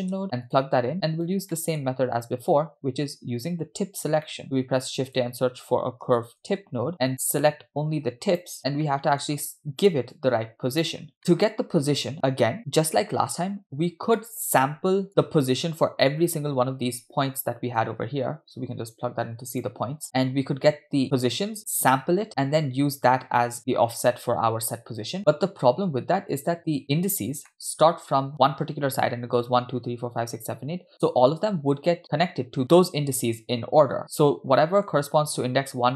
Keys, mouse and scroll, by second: 0.9 click, 1.6 middle click, 1.8-2.3 scroll up 3, 4.3 middle click, 4.4 shift+a, 7.3-8.5 drag, 8.8 scroll down 7, 8.8 middle click, 9.5-9.9 drag, 10.2-10.9 drag, 11.4 middle click, 11.4-12.1 scroll up 2, 13.8-14.1 scroll down 2, 14.2 middle click, 15.1-15.5 drag, 17.8-19.7 drag, 20.5-21.1 scroll down 2, 22.3 middle click, 23.7 scroll up 2, 25.2-25.6 middle drag, 25.7-26.2 scroll down 2, 27.5-27.9 middle drag, 34.6 middle drag, 34.9 scroll up 3.